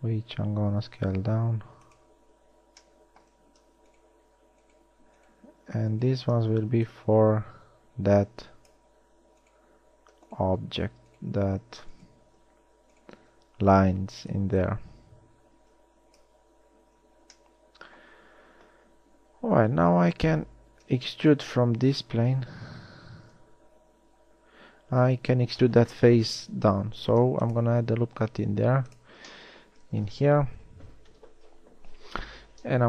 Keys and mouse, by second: 17.2 a, 27.5 ctrl+r.